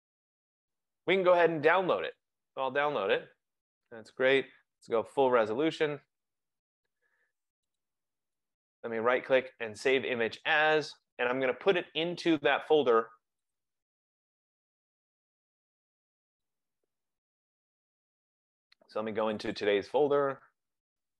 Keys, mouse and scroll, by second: 2.4 click, 5.0 click, 7.9 click, 8.6 right click, 10.1 click, 16.6 click, 16.9 click, 19.4 click, 19.6 click.